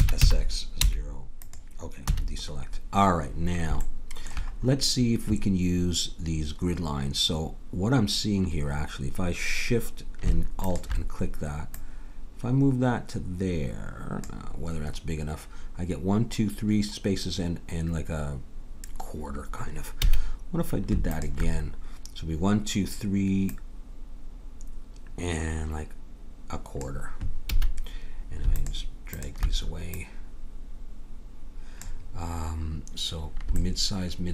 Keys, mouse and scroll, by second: 2.0 a, 10.6-13.5 drag, 20.0 a, 21.1-23.0 drag, 23.5-25.2 drag, 27.5 a, 28.5-31.8 drag.